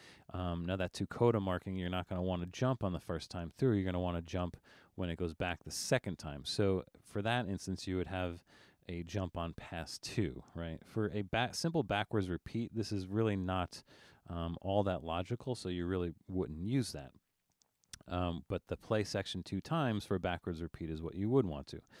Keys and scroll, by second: 8.5 2, 16.0 1.